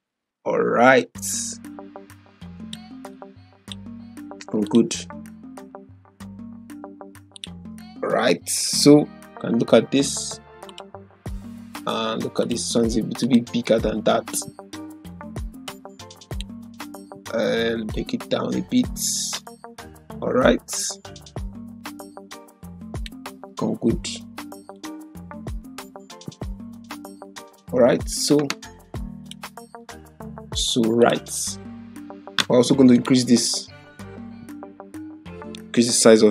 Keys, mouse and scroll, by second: 7.3 click, 8.4 ctrl+0, 10.6-15.7 drag, 27.2 typing, 29.2 click, 29.5 typing, 35.7-36.3 click.